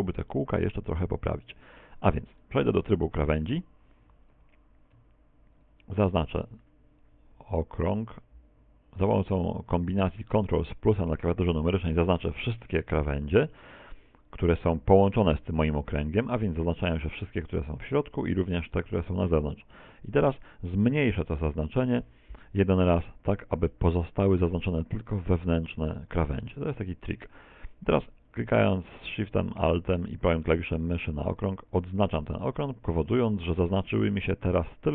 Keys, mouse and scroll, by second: 0.9-1.5 scroll up 2, 1.5 shift+middle click, 1.5-2.1 scroll up 3, 2.1-2.5 scroll up 1, 2.5 ctrl+Tab, 4.8 right click, 5.5 alt+shift+right click, 8.3 ctrl+KP_Add, 12.8 middle click, 13.8 middle click, 21.7 ctrl+KP_Subtract, 31.3 alt+shift+right click, 32.5 middle click.